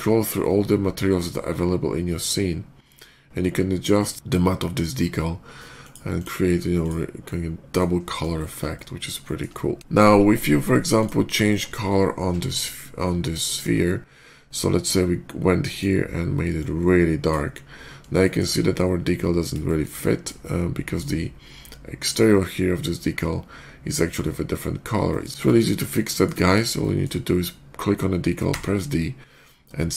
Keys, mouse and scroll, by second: 1.9 scroll down 1, 3.4 scroll down 1, 5.6 click, 6.0 click, 6.3 middle click, 6.6 click, 7.1-7.6 middle drag, 8.2 shift+middle drag, 8.6 shift+middle drag, 9.1 shift+middle drag, 10.3 middle click, 10.8 click, 11.4 shift+middle click, 13.3 shift+middle click, 15.5 shift+click, 16.4 click, 18.1 shift+middle click, 18.4 shift+middle click, 19.5 shift+middle click, 20.3-20.8 shift+middle drag, 23.3 shift+click, 24.5 middle click, 24.7 middle click, 24.9 shift+middle click, 25.5 shift+click, 25.9 shift+middle drag, 26.3 shift+click, 26.6 shift+middle drag, 28.3 d.